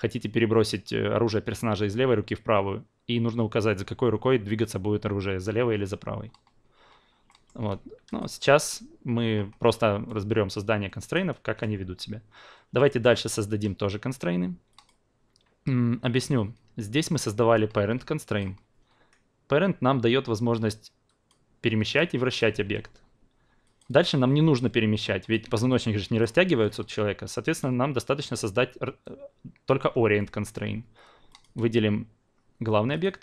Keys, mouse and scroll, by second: 7.3 alt+middle click, 8.1-11.5 drag, 11.5 ctrl+z, 12.8 alt+middle drag, 14.7 drag, 16.0 drag, 17.5-18.4 drag, 18.6 ctrl+z, 21.1 drag, 21.9-25.7 drag, 27.4-29.8 drag, 29.8 q, 31.3 drag, 32.9 shift+click.